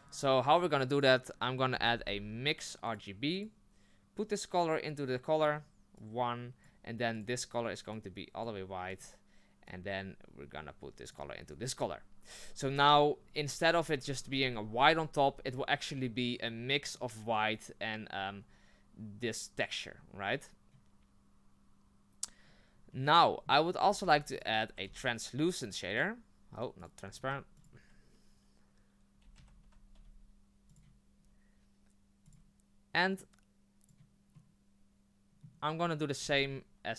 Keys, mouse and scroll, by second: 5.9 click, 11.1 click, 16.8 click, 33.2 click, 36.3 click.